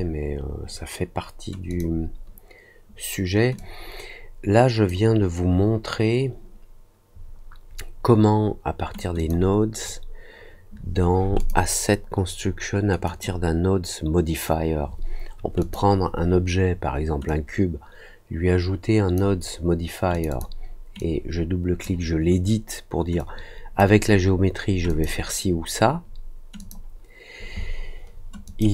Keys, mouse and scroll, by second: 1.6 click, 3.5-4.8 drag, 9.1 click, 11.3 click, 13.0 click, 15.5 click, 17.2-19.1 drag, 20.1 click, 20.2 click, 20.9 click, 23.1-23.7 drag, 24.8 click, 26.5 click, 28.4 click.